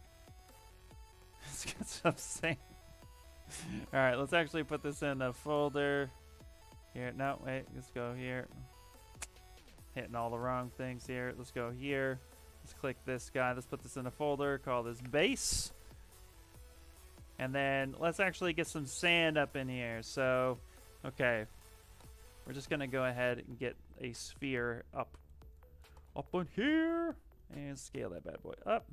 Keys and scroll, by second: 4.7 ctrl+g, 6.8 Escape, 7.0 Escape, 7.3 Escape, 9.0 ctrl+n, 10.2 t, 10.9 f, 12.8 ctrl+f, 14.0-15.2 typing, 23.6 w.